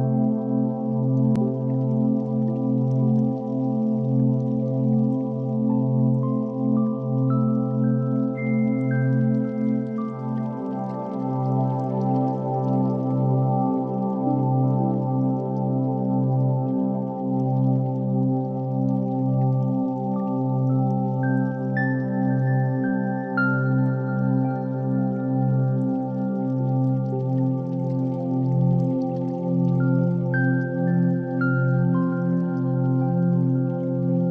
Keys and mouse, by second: 0.1 click, 1.3 s, 4.7 Tab, 5.4 alt+z, 5.8 click, 6.2-6.9 middle drag, 7.2 click, 7.5 Tab, 8.0 ctrl+r, 9.6 ctrl+b, 12.7 Tab, 13.3 alt+z, 13.8 alt+z, 14.2-16.3 middle drag, 16.5 shift+middle click, 17.2 middle click, 17.9 Tab, 18.4 3, 19.0 shift+click, 19.4 shift+click, 19.8 shift+d, 20.9 p, 21.5 Tab, 21.8 click, 22.2 click, 23.8 Tab, 24.2 a, 24.7 middle click, 25.7 KP_3, 26.8 e, 28.6 middle click, 29.4 ctrl+r, 31.9-33.7 middle drag.